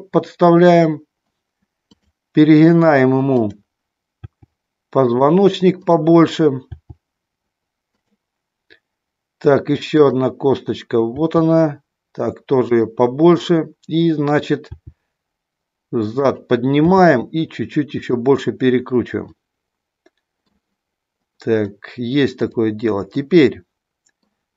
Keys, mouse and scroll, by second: 4.1 g, 5.1 click, 6.7 g, 8.0 click, 11.2 g, 12.6 click, 13.1 click, 14.6 g, 16.2 click, 16.9 r, 18.0 click, 19.3-20.5 middle drag, 23.3 middle click.